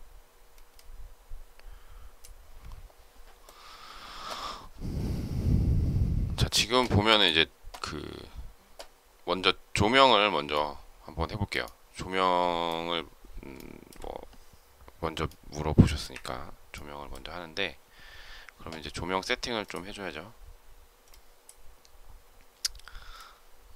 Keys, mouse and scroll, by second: 13.5 shift+middle click, 16.0 Delete.